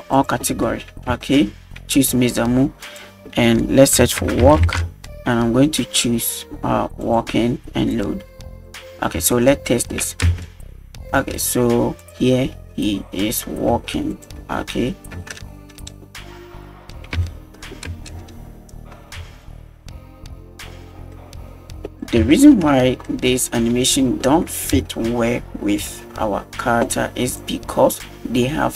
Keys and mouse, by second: 0.6 middle drag, 1.2 shift+middle click, 2.8-7.2 drag, 7.9 click, 8.7-9.0 middle drag, 9.3-9.9 shift+middle drag, 10.3 space, 11.1 space, 12.0 click, 12.6 space, 13.7 space, 14.2 click, 14.6 space, 15.2 space, 15.3-15.9 middle drag, 16.6 click, 16.8 middle drag, 17.2-17.6 shift+middle drag, 17.9 space, 19.1 space, 19.5 click, 21.1-21.8 middle drag, 21.8 space, 22.3 shift+middle drag, 23.1 middle drag, 24.9 space, 25.9 space, 27.4 click.